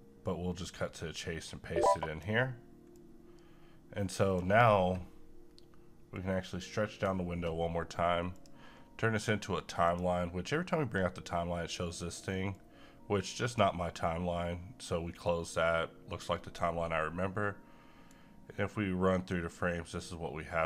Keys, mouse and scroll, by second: 0.7-8.3 drag, 12.5-18.2 drag, 18.2-20.6 right drag.